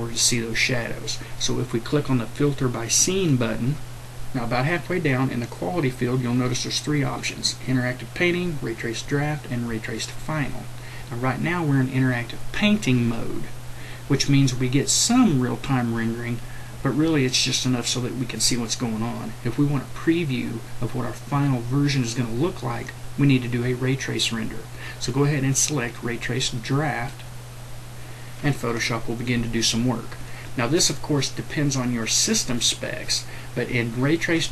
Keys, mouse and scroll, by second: 3.0 click.